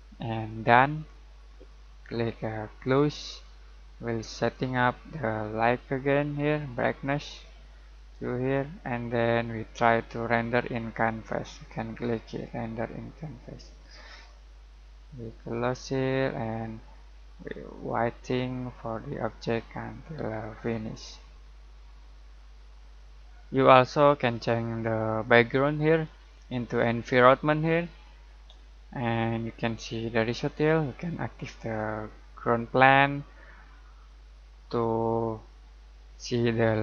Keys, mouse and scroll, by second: 2.8-11.0 drag, 11.0 click, 15.2-15.7 typing, 15.6 click, 17.3 scroll down 1, 17.9-19.7 middle drag, 19.7-20.1 scroll down 1, 20.1-20.7 scroll up 1, 25.7 click, 31.8 click, 34.7 typing.